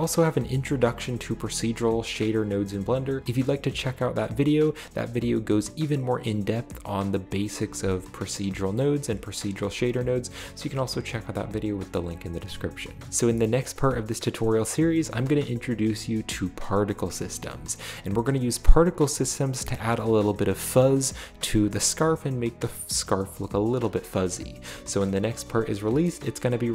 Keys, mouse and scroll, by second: 13.1-13.7 middle drag, 13.5-14.5 scroll up 2, 14.3-15.0 shift+middle drag, 16.9-17.8 shift+middle drag, 17.3-19.0 scroll up 1, 21.2 click, 21.3-21.7 right drag, 24.1-24.4 scroll down 2.